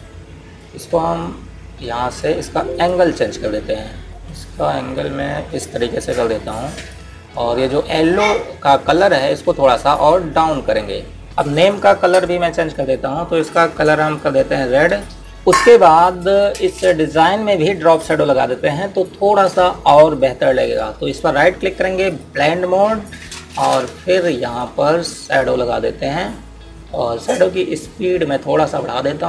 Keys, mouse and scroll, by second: 10.8 click, 17.9 click, 21.9 right click, 22.9 click, 28.3 click.